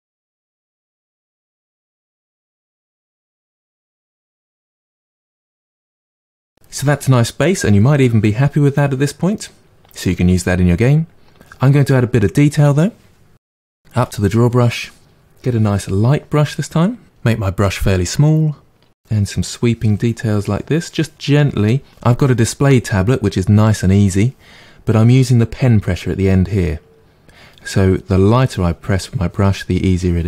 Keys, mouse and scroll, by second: 0.1 middle click, 0.4 click, 1.1 middle click, 2.0-3.4 drag, 3.4 middle click, 3.7 click, 4.3 middle click, 4.7 click, 5.0 middle click, 5.4 click, 6.2 middle click, 14.0 click, 15.4 click, 16.0-17.3 middle drag, 17.3 f, 18.3-21.9 drag, 28.1-30.2 drag.